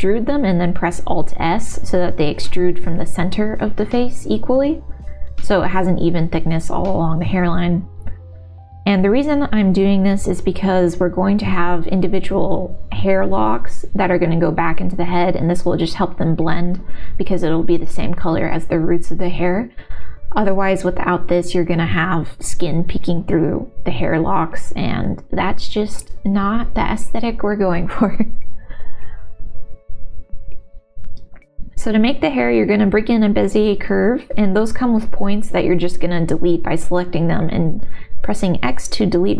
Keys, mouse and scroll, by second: 0.0 e, 0.6 alt+s, 2.3 middle click, 2.9 g, 3.3 click, 3.6 middle click, 4.4 middle click, 4.8 g, 5.9 middle click, 6.6 click, 6.8 g, 7.7 middle click, 8.1 click, 8.8 g, 9.0 click, 9.2 middle click, 9.5 middle click, 10.8 middle click, 11.1 click, 11.7 g, 13.7 middle click, 14.2 middle click, 15.7 middle click, 15.7 x, 16.1 scroll down 1, 16.3 click, 17.7 g, 18.7 middle click, 19.4 3, 19.5 click, 20.1 e, 21.2 g, 22.4 r, 23.0 s, 24.3 g, 24.4 middle click, 25.0 g, 25.5 middle click, 25.7 click, 26.1 g, 26.9 1, 27.4 click, 27.9 g, 29.4 g, 30.0 click, 30.3 g, 30.8 shift+s, 31.3 shift+a, 33.2 Tab, 33.9 a, 34.2 x.